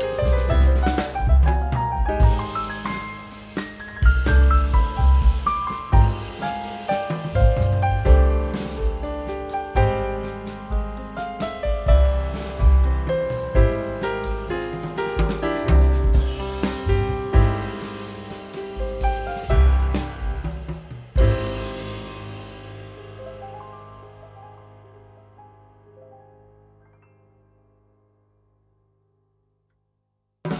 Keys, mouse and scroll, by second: 4.9 shift+click, 6.2 c, 13.8 right click, 22.8 scroll down 1, 25.1 scroll up 1.